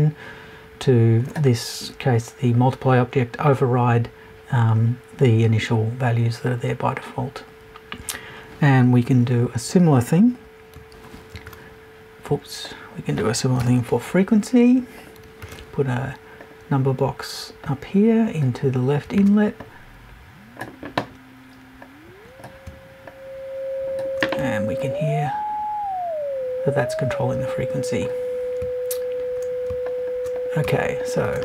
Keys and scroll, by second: 13.6 BackSpace.